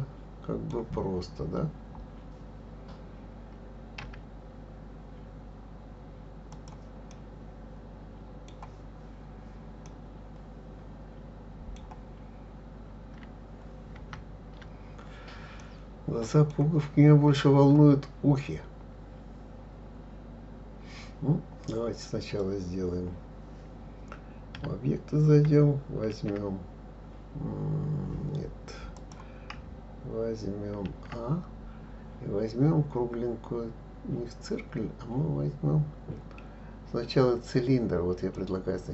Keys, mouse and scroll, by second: 1.2 scroll up 4, 1.7-2.6 scroll down 1, 4.0 s, 7.1-12.9 middle drag, 13.9 ctrl+z, 15.5 scroll down 1, 15.6-18.6 middle drag, 24.6 Tab, 26.1 shift+s, 30.9 shift+a.